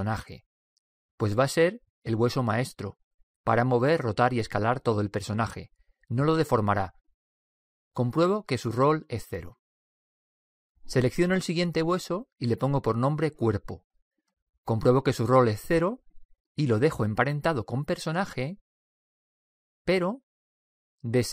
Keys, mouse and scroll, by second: 12.2 right click, 13.2-14.9 drag, 18.8 typing.